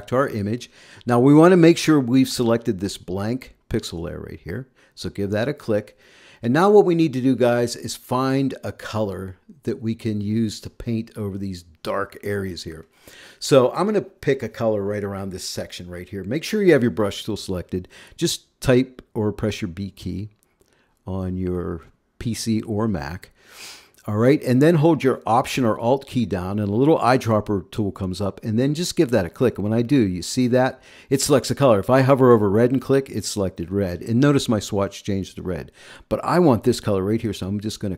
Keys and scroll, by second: 19.6 b.